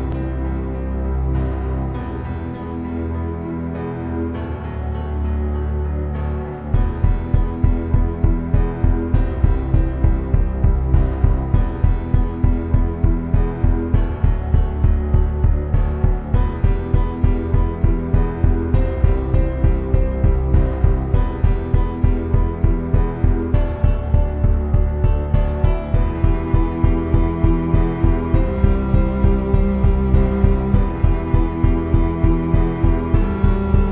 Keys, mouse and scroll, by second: 2.3 s, 3.3-4.9 middle drag, 5.1 shift+a, 6.5 t, 9.9 z, 10.8 Tab, 16.8 Tab, 17.5 z, 20.6 click, 23.3 z, 23.3 z, 23.7 z, 26.2 click, 27.1-28.2 drag, 32.7 middle click, 33.6 middle click.